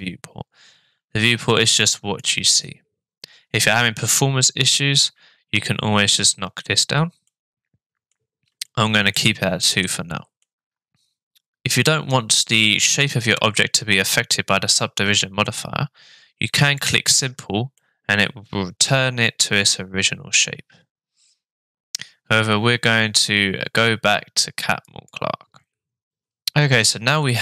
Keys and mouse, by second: 1.8 click, 7.3 middle click, 8.6-9.1 shift+middle drag, 9.7 middle click, 16.5 click, 17.7-20.9 middle drag, 24.9 click.